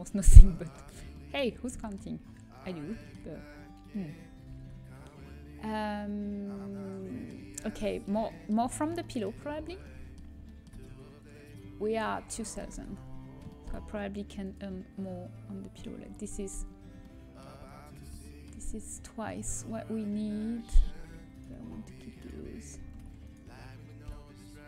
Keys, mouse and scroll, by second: 1.4 a, 5.2 Tab, 5.2 a, 7.7 Tab, 9.0 Tab, 9.0 click, 9.7 Tab, 10.8 Tab, 12.6 Tab, 15.4 click, 15.8-19.8 middle drag, 19.8-21.6 right drag, 22.8 ctrl+z.